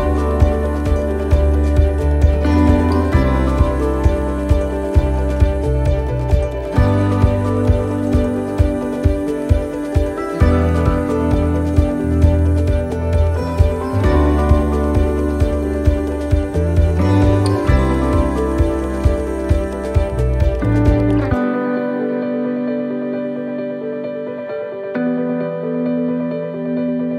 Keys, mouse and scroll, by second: 0.2 shift+middle click, 0.8-1.3 scroll down 4, 1.3 shift+middle click, 3.3 shift+middle click, 6.1 shift+middle click, 7.2 shift+middle click, 7.3-8.2 scroll up 4, 7.8 shift+middle click, 8.7 middle click, 10.2 right click, 10.9 right click, 11.3 alt+shift+right click, 11.4 alt+shift+right click, 12.4 click, 14.1 middle click, 14.4 scroll down 1, 15.4 scroll down 3, 15.7 shift+middle click, 16.4 a, 17.4 u, 21.4 click, 22.8 middle click, 23.2 scroll down 2, 23.7 middle click, 24.6-26.2 scroll down 5, 25.0 middle click.